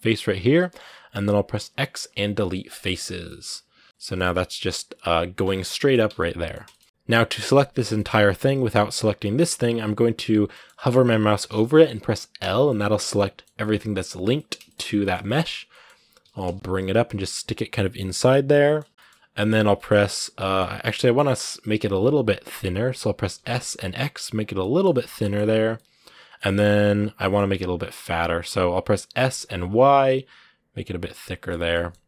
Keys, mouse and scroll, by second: 2.6 x, 2.9 scroll down 2, 3.0-5.9 middle drag, 5.9 Tab, 6.0 middle click, 6.7 scroll up 1, 6.8 a, 7.6 scroll down 1, 7.7 middle click, 8.6-10.3 right drag, 10.3-12.2 middle drag, 12.2 l, 12.5-13.7 middle drag, 13.7-14.1 scroll up 1, 14.1 middle click, 14.7 scroll up 1, 14.8-16.0 shift+middle drag, 16.0 g, 19.1-23.1 middle drag, 23.1 s, 24.4 middle click, 24.7 scroll up 1, 24.9 g, 25.5-26.7 middle drag, 26.7 scroll down 1, 26.9 s, 30.9 scroll down 1, 31.0 middle click, 31.5 g.